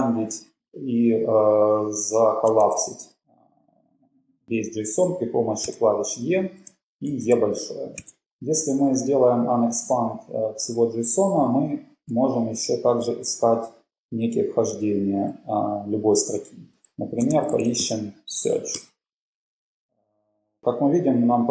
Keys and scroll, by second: 2.9 shift+e, 7.3 e, 8.3 shift+e, 12.3 /, 17.1-19.2 typing, 18.8 Return.